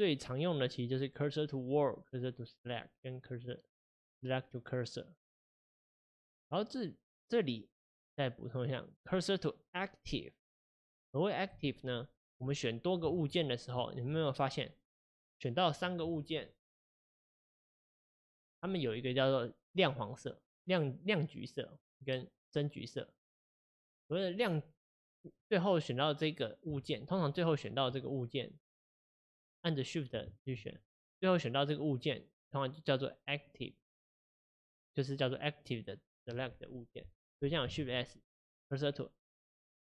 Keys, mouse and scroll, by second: 11.9 click, 12.6 click, 13.2 shift+click, 13.8 shift+click, 14.5-16.7 middle drag, 16.7 g, 26.8 shift+click, 28.0 shift+click, 30.6 shift+click, 31.2 shift+click, 31.9 shift+click, 37.9 shift+s.